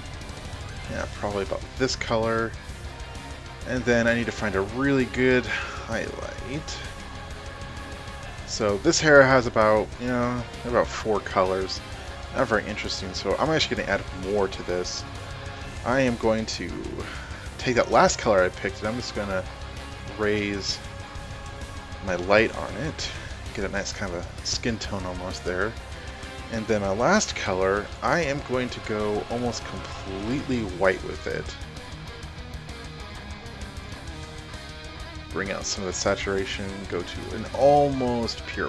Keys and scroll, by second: 9.9 space.